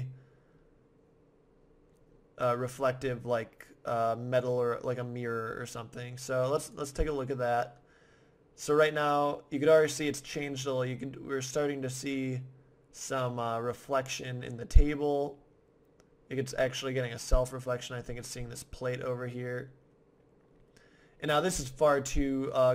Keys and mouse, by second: 6.9 middle click.